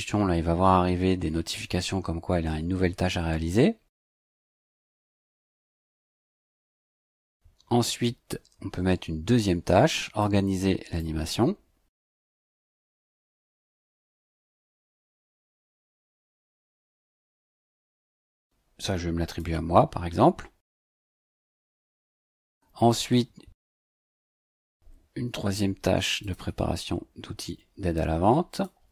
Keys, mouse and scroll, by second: 6.4 click, 10.2 click, 12.0 ctrl+c, 13.1 click, 14.0 KP_2, 14.4 KP_Subtract, 14.7 space, 15.1 ctrl+v, 16.7 click, 19.2 click, 21.1 click, 23.5 click, 25.2 ctrl+c, 26.2 ctrl+click, 26.4 ctrl+v, 28.5 click.